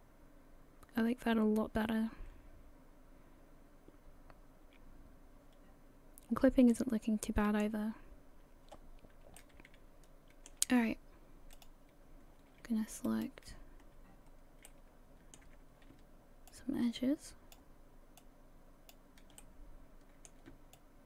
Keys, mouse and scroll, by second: 2.1 middle click, 9.4 middle click, 11.6 click, 13.1 alt+right click, 14.3 scroll down 2, 14.7 middle click, 15.6-15.9 scroll down 1, 16.5 ctrl+click, 18.2 ctrl+click, 19.4 middle click, 20.7 ctrl+click.